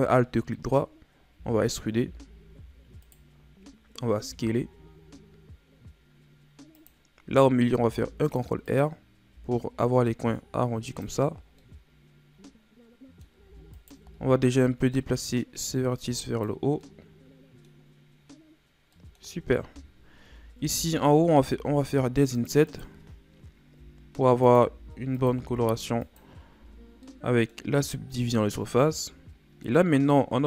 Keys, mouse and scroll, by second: 1.4 z, 2.0 z, 2.6 e, 4.3 s, 7.7 ctrl+r, 9.3 s, 11.6-13.8 middle drag, 13.8 alt+right click, 15.3-16.8 drag, 16.8-20.3 middle drag, 20.3 Tab, 20.6 Tab, 20.9 scroll down 1, 21.1 middle click, 21.6 ctrl+Tab, 22.7 right click, 23.8 i, 24.7 i, 26.6 Tab, 27.1-28.9 middle drag, 28.9-29.4 scroll down 4, 29.7-30.4 middle drag.